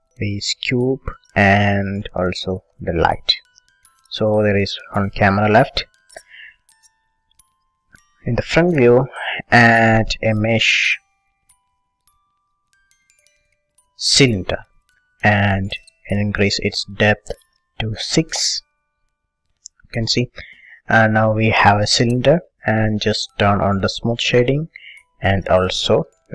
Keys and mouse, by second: 0.0 Delete, 2.2-4.0 drag, 2.9 Delete, 4.4-7.8 middle drag, 7.8 KP_1, 9.2-11.2 drag, 16.4-18.8 drag, 18.6 KP_Divide, 18.8 middle click, 19.9 middle click, 20.6 middle click, 21.0-24.1 middle drag, 24.1-25.7 drag, 25.7-26.3 right drag.